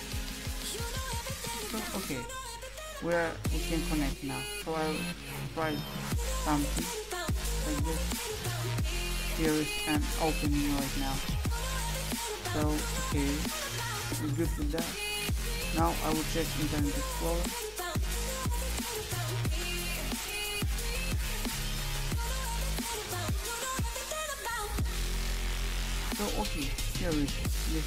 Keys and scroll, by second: 4.6-5.7 typing, 19.2-23.4 typing.